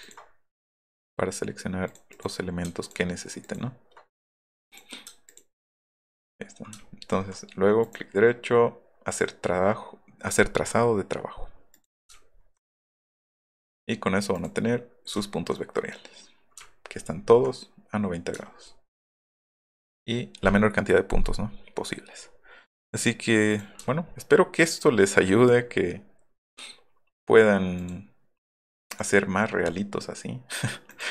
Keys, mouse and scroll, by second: 0.0 ctrl+click, 1.9 click, 2.1 click, 2.8 ctrl+click, 3.4 ctrl+click, 4.3 click, 4.7 click, 5.3 ctrl+click, 7.1 alt+scroll up 2, 7.8 right click, 11.8 click, 12.2 alt+middle click, 12.2 alt+scroll down 2, 12.7 right click, 13.5 click, 14.3 click, 15.2 alt+click, 16.6-17.3 alt+scroll up 3, 18.4 alt+scroll up 2, 18.7 alt+scroll down 2, 19.6 click, 23.5 click, 23.9 scroll up 1, 24.1-25.0 alt+scroll down 8, 27.8 click, 28.9 click, 30.9 F3, 30.9 click.